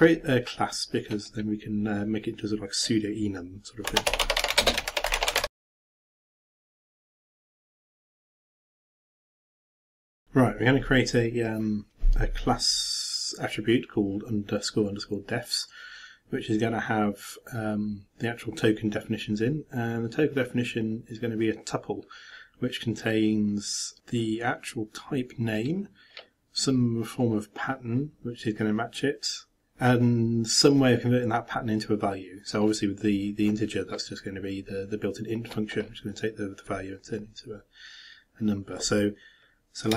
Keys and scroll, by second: 4.6-7.8 typing.